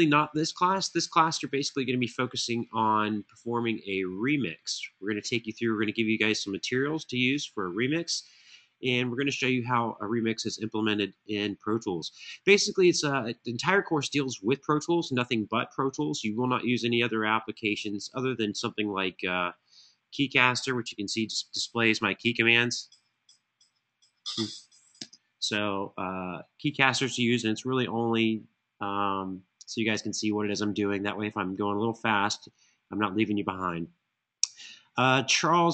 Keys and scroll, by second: 20.8-21.4 typing, 22.4-23.6 typing, 24.8 space.